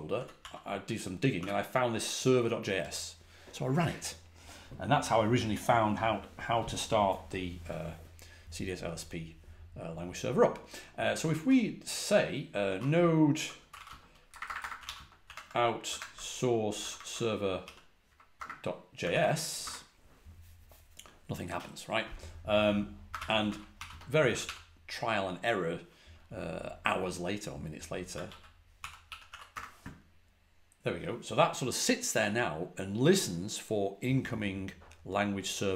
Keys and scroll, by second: 0.0-1.3 typing, 11.3 typing, 13.0-18.2 typing, 19.0 ctrl+l, 19.5 Return, 22.7-24.3 typing, 27.8-29.7 typing.